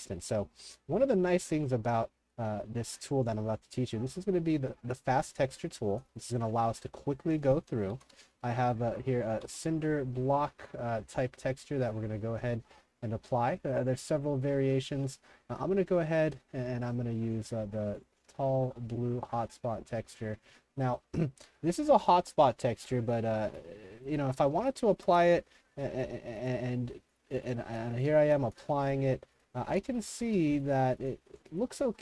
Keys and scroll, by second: 0.0-1.1 typing, 7.7-10.1 typing, 23.1-25.1 typing, 28.7 t, 29.7 shift+t, 30.2 shift+t.